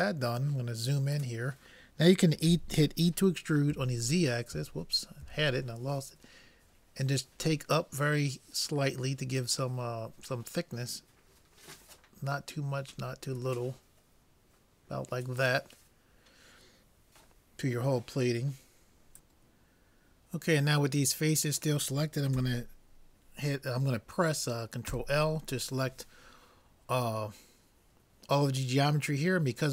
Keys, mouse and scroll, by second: 0.6 middle click, 2.5 e, 25.0 ctrl+l.